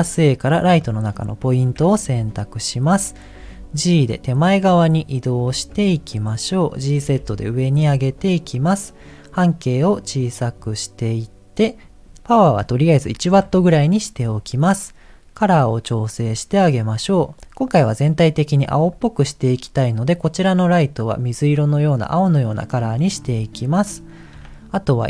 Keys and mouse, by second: 1.7 KP_7, 3.4 g, 5.9 middle click, 6.4 middle click, 7.0 g, 9.6-10.6 drag, 11.8 click, 12.4-13.4 drag, 24.3 KP_7.